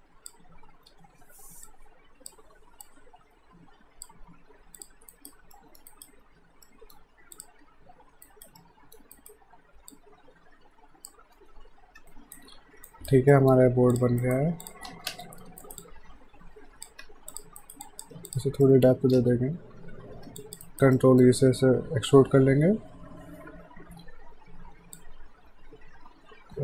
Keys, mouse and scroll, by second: 0.9 w, 1.7 click, 4.5 q, 4.8 click, 5.1 alt+right click, 5.5 alt+middle click, 5.9 alt+right click, 6.6 alt+middle click, 7.3 click, 7.6 w, 8.2 alt+right click, 8.6 alt+middle click, 9.2 alt+right click, 9.9 click, 12.0 F5, 12.1 alt+right click, 13.3 alt+middle click, 13.7 q, 13.9 click, 14.2 alt+right click, 14.6 click, 14.9 space, 15.6 alt+right click, 15.8 alt+click, 17.0 q, 17.3 click, 17.6 right click, 17.8 click, 18.6 alt+middle click, 19.2 space, 20.4 alt+click, 20.7 right click, 21.0 middle click, 22.1 e, 25.0 click.